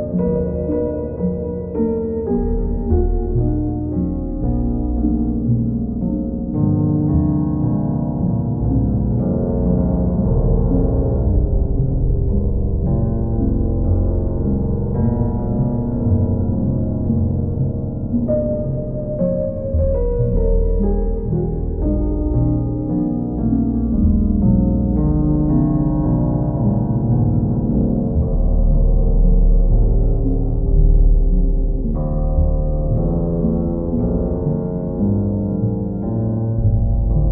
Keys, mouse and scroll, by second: 4.5 click, 5.0 shift+click, 6.2 alt+click, 9.6 alt+click, 10.1 alt+click, 12.7 r, 13.5 alt+click, 16.7-17.8 drag, 19.4 click, 19.8 shift+click, 20.8 click, 36.3 click, 37.2 click.